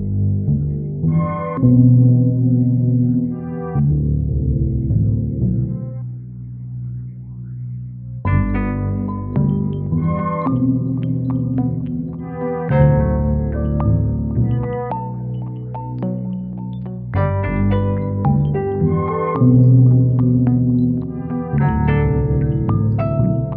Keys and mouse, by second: 1.2 e, 3.6 click, 4.3 shift+click, 5.2 e, 7.4 Tab, 10.1 Tab, 11.5 Tab, 12.7 s, 13.6 shift+z, 16.0 s, 17.4 Tab, 18.4 a, 19.0 s, 20.7 z, 22.7 s.